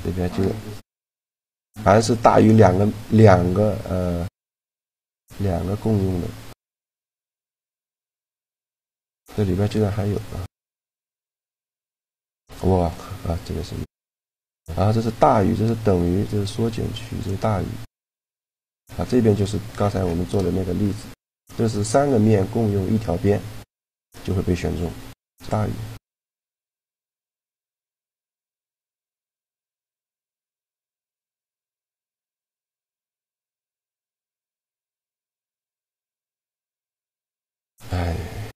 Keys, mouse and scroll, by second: 2.0-4.0 middle drag, 4.1 a, 4.9-6.1 right drag, 6.1 click, 8.1 shift+g, 10.3-13.0 drag, 13.9-15.7 drag, 17.8-23.6 middle drag, 25.6-26.8 drag, 26.0-27.3 middle drag, 30.3-32.9 middle drag, 33.2 a, 34.8-36.6 drag, 34.8-36.6 middle drag, 37.1 n.